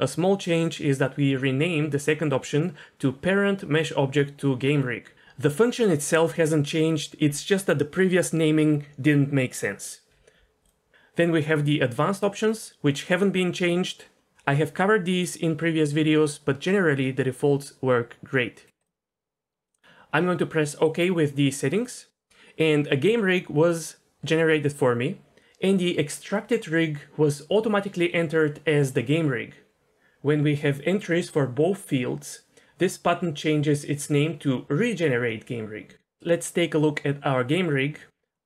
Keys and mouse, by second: 38.2 Tab, 38.4 Tab.